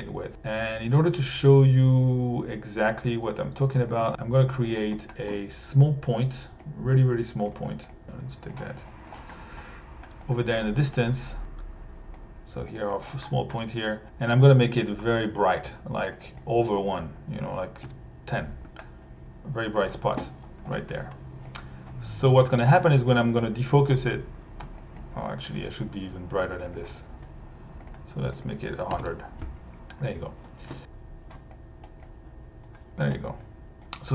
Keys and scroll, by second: 3.7-4.6 typing, 17.5-18.2 typing, 23.1 1, 28.9 0, 29.0 Home.